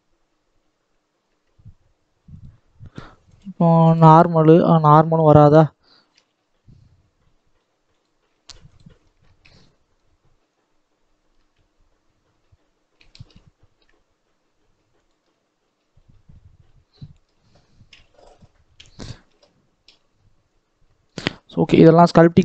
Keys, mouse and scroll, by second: 2.3-6.1 drag, 6.1 g, 8.8 scroll down 1, 9.1 shift+middle click, 9.4-10.4 scroll up 2, 10.4-11.3 scroll down 1, 11.3 e, 15.1-17.8 middle drag, 17.8 KP_1, 19.2 ctrl+z, 20.4 click, 21.2 scroll down 1, 21.2-22.4 middle drag.